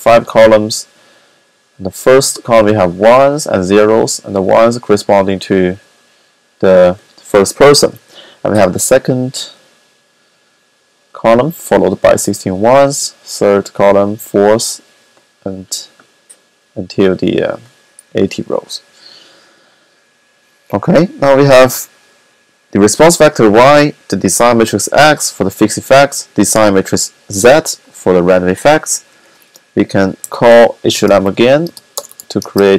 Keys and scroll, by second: 29.9 typing, 31.0-32.7 typing.